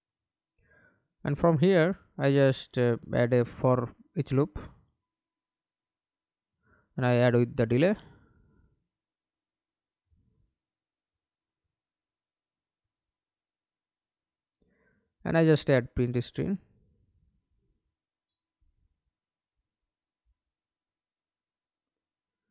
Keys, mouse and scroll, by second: 1.8-5.0 typing, 8.8 Return, 13.7 right click, 14.5 right click, 17.8-19.6 typing.